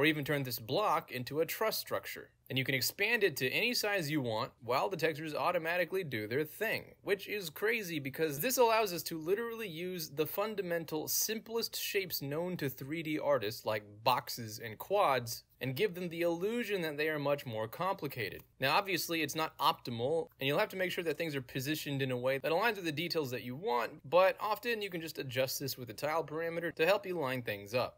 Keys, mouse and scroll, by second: 6.0-10.0 drag, 10.9-13.9 drag, 14.0-17.4 drag, 18.8-21.8 alt+drag, 22.1 ctrl+z, 22.4 alt+click, 22.9 alt+right click, 23.2 alt+middle click, 23.6 alt+click, 23.8-27.7 drag.